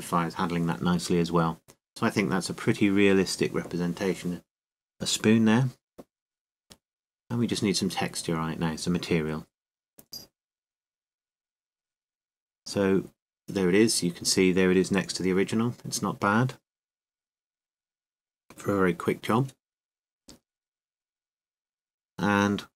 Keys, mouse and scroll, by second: 1.0 middle click, 2.0-3.6 middle drag, 4.2-6.7 middle drag, 10.8 KP_7, 12.5 KP_7, 13.9 g, 15.6 click, 17.3 click, 17.3 middle click, 19.9 middle click.